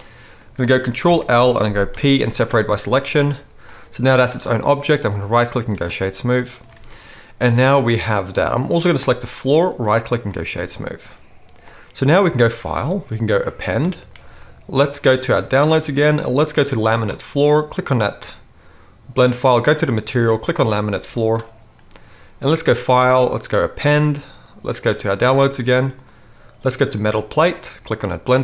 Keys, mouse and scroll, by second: 1.0 ctrl+l, 1.9 p, 3.0 Tab, 5.0-12.7 right drag, 6.6 alt+a, 8.9 click, 8.9 middle click, 12.7-13.9 middle drag, 13.9-28.4 drag, 21.4-23.8 middle drag, 21.4-23.8 right drag.